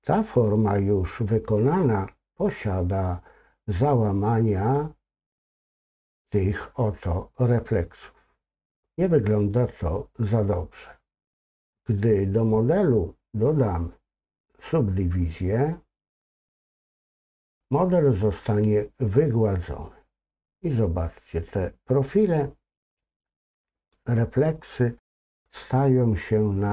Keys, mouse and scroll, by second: 16.5 click.